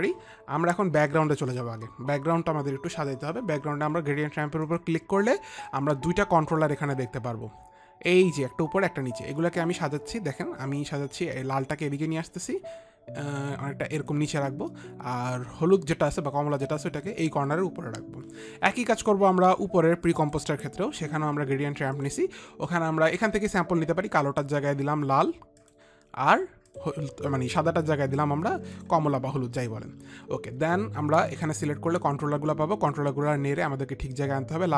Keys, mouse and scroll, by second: 1.6 click, 5.2 click, 10.3 click, 15.7 click, 20.7 click, 22.5 click, 24.6 click, 26.1 click, 27.2 click, 29.3 click, 31.8 click, 33.4 click.